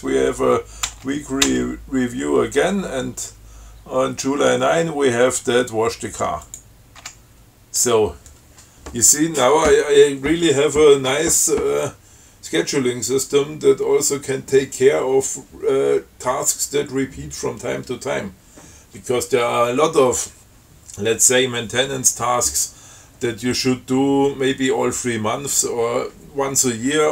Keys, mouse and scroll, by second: 1.1 f, 6.7 click, 7.2 q.